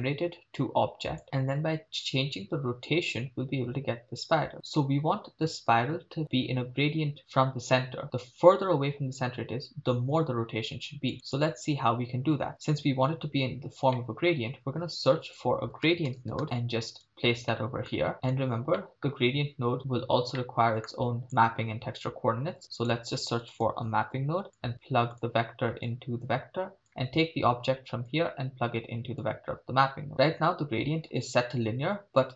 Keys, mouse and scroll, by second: 11.1 click, 11.3-12.5 drag, 13.9-14.3 middle drag, 14.7 shift+a, 17.5 middle click, 18.1 click, 18.8 middle click, 19.9-20.4 scroll down 2, 20.4 middle click, 21.2 click, 22.7 shift+a, 24.6 p, 25.8-26.9 drag, 28.1-29.2 drag, 30.3-32.3 scroll up 4.